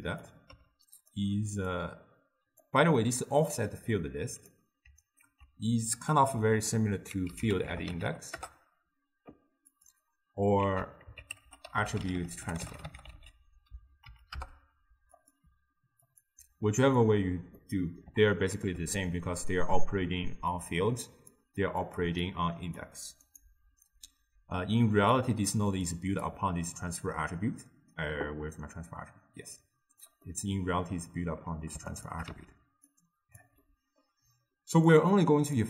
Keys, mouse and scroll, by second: 0.6 g, 1.8 click, 3.5 drag, 5.3 ctrl+a, 10.7 ctrl+a, 11.5 t, 16.1-17.6 drag, 17.6-20.6 middle drag, 20.6 click, 22.3-23.4 drag, 25.2 click, 26.3 click, 30.4-32.0 middle drag, 32.0 shift+click, 32.3 x, 32.9 drag, 33.7-35.0 middle drag, 35.0 click.